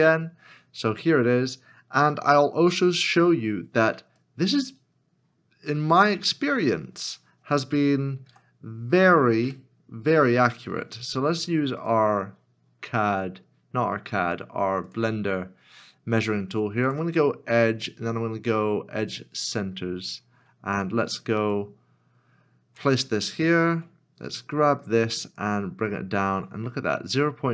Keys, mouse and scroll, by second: 8.3 KP_7, 9.6 KP_Decimal, 20.1 KP_Decimal, 20.3-21.0 scroll up 1, 25.2 ctrl+click.